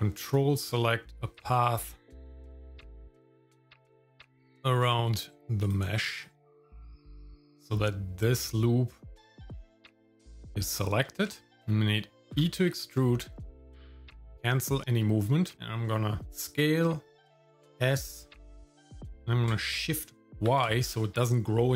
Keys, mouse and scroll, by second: 0.2 ctrl+click, 1.3 ctrl+click, 2.3 ctrl+click, 2.9 shift+middle click, 4.4 ctrl+click, 4.9 middle click, 5.6 ctrl+click, 6.2 ctrl+click, 7.5-10.9 shift+middle drag, 11.3 shift+middle click, 12.3 e, 15.4 middle click, 16.2 s.